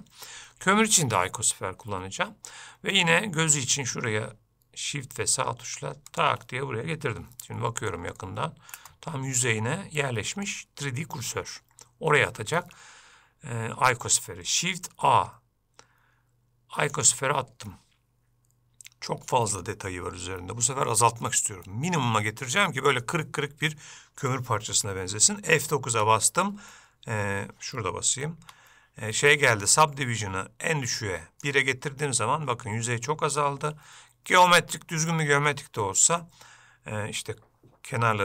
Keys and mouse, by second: 3.1 middle click, 6.3 shift+middle click, 7.7 middle click, 8.4 ctrl+middle click, 9.1-10.6 middle drag, 15.1 shift+a, 27.4 F9, 28.6 F9.